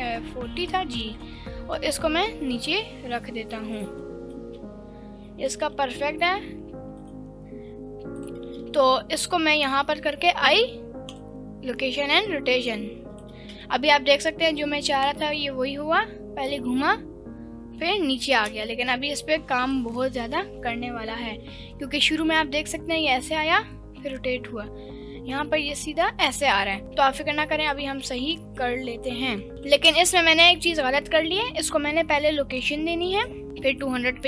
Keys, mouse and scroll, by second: 0.6 ctrl+drag, 1.2 g, 3.8 ctrl+drag, 4.0-4.4 middle drag, 4.6-5.1 scroll up 1, 5.1-5.5 scroll up 2, 5.3 middle click, 5.7 g, 5.7 z, 7.0 right click, 8.2 click, 9.1 scroll down 1, 9.4 scroll up 1, 9.8 i, 12.2-13.4 drag, 13.4 space, 18.5 space, 19.7-26.8 drag, 27.7-28.5 drag, 29.5 ctrl+z, 29.9 ctrl+z, 30.1 ctrl+z, 30.4 ctrl+z, 31.9 i, 33.4-34.1 drag.